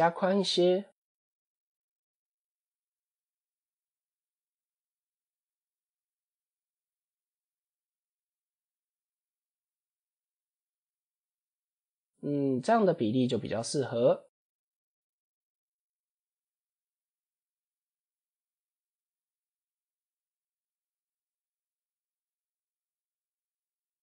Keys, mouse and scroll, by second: 0.1 Tab, 2.6 alt+shift+click, 3.6 alt+shift+click, 4.3 KP_7, 5.1 scroll down 2, 6.2 s, 10.1 click, 11.0 Tab, 11.4 KP_0, 12.2 scroll up 1, 13.5-14.0 scroll down 7, 14.3 click, 15.8 click, 16.1 click, 16.9 click, 17.4-19.0 middle drag, 19.8 click, 21.4-22.4 scroll up 8, 22.5 click.